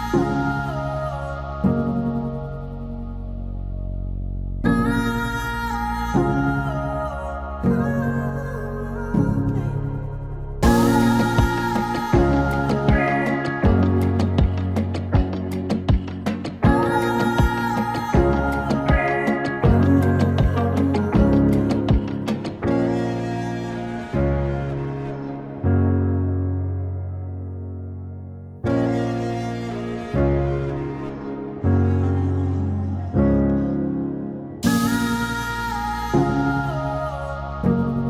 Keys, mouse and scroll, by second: 0.0 click, 1.1 typing, 3.2 click, 4.5 click, 6.2-10.9 drag, 11.7 typing, 13.2-13.9 typing, 13.4-17.0 drag, 17.0 right click, 18.7-24.1 drag, 24.1 right click, 25.3-31.5 drag, 32.0 space, 35.0 space, 36.3 click, 37.6 r.